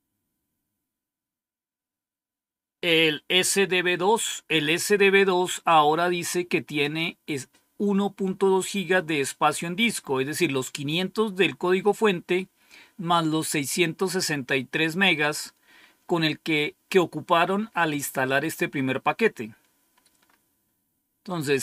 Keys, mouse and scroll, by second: 5.6-6.8 drag, 19.5-21.6 scroll down 2.